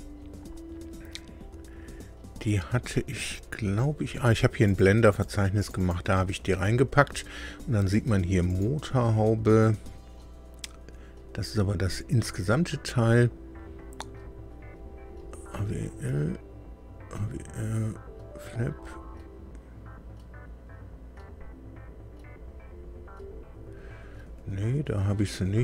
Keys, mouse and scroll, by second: 3.1-3.7 scroll up 2, 4.6 click, 5.1 click, 5.5 click, 8.4 right click.